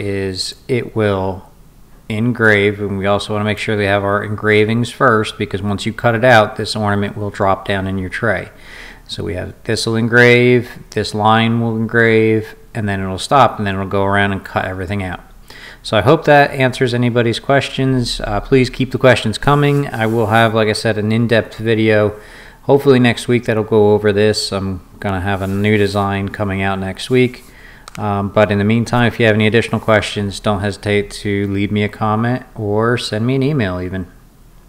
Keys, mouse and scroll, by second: 0.4 click, 2.4-3.5 drag.